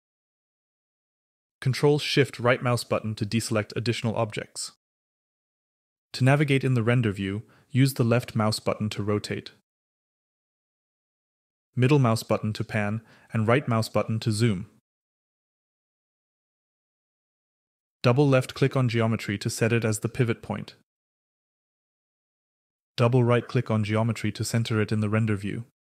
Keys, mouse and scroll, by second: 1.9-5.5 ctrl+shift+right drag, 7.4-9.7 drag, 11.5-13.0 middle drag, 13.6-16.9 right drag, 17.6-20.6 drag, 22.9-25.8 right drag.